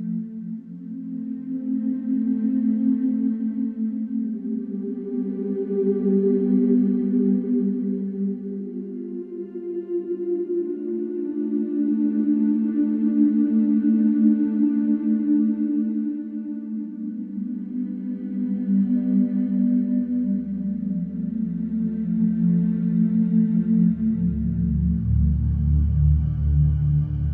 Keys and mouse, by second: 4.0-8.0 drag, 8.9-12.4 alt+drag, 14.3 click, 16.8-18.7 drag, 23.8-24.7 drag, 26.2 click, 27.1 click.